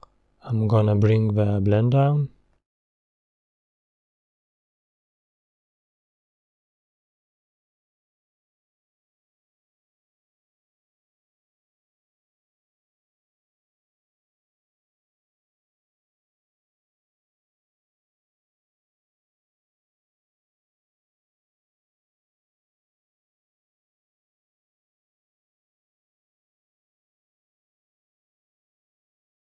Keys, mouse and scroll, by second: 1.9-7.3 drag, 7.3-8.7 middle drag, 8.7-9.1 scroll down 3, 9.1-10.3 middle drag, 10.3-10.8 scroll up 4, 11.6 click, 12.2 scroll down 2, 12.4-20.9 middle drag, 20.9 click, 21.6-22.9 middle drag, 22.9 scroll down 2, 24.5 scroll up 2, 25.1-26.7 middle drag, 26.7 click, 28.2 scroll down 2, 28.3-29.5 middle drag.